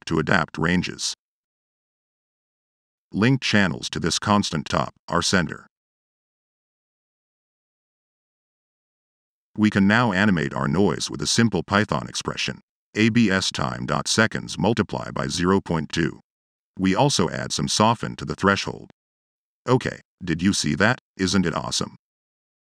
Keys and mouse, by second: 0.0 Tab, 9.6 click, 10.2 click, 11.0 click, 11.5 click, 11.9 click, 16.9 click, 17.4 middle click.